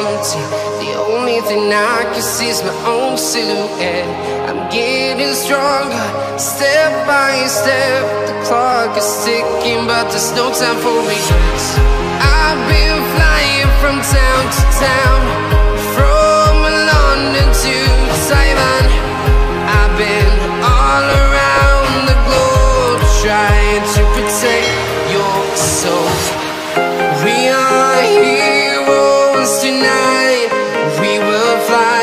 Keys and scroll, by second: 31.5 ctrl+shift+a.